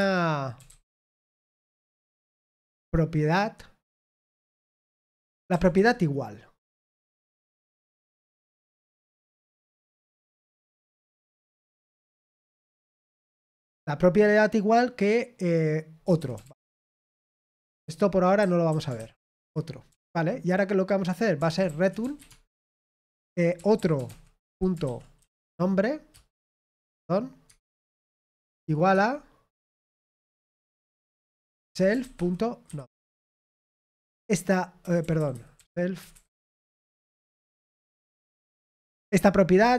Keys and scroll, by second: 0.0-2.1 typing, 8.9 BackSpace, 9.4 Tab, 11.4-13.1 typing, 16.5-17.2 typing, 19.4 Escape, 19.4-20.3 typing, 22.2 typing, 25.2 typing, 26.1 Return, 26.6 BackSpace, 26.8 BackSpace, 27.4 Tab, 27.8-28.6 typing, 32.8-34.0 typing, 35.3-36.1 typing, 36.0 Escape, 37.5-38.3 typing.